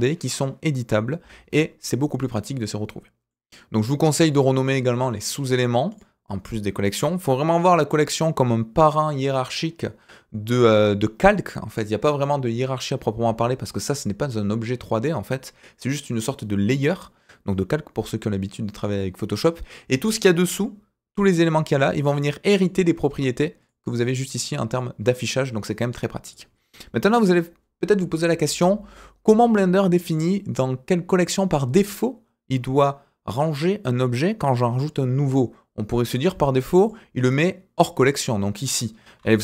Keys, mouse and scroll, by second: 2.2-3.3 middle drag, 4.3 click, 5.9 click, 21.4 click, 21.9 click, 22.5 click, 23.6 click, 24.3 click, 24.7 click, 26.2 click, 36.8 click, 37.4-38.1 drag, 39.2 shift+a.